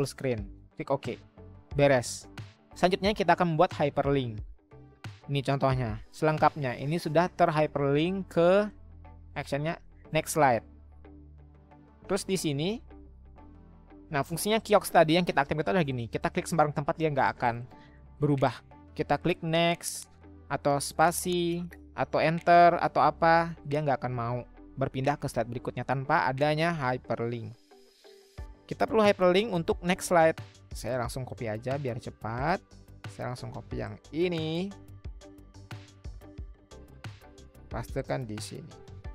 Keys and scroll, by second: 19.2 Right, 19.5 Right, 19.7 Right, 21.0 Right, 23.3 Right, 23.5 Right, 27.5 Escape, 35.6 ctrl+c, 38.8 ctrl+v.